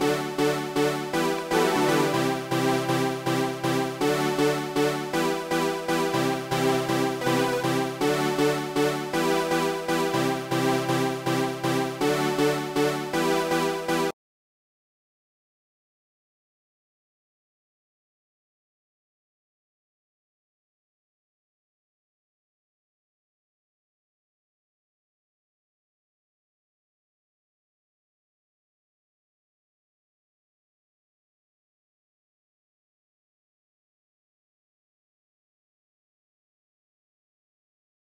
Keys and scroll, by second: 0.1 shift+Tab, 2.5 shift+Right, 8.1 shift+Right.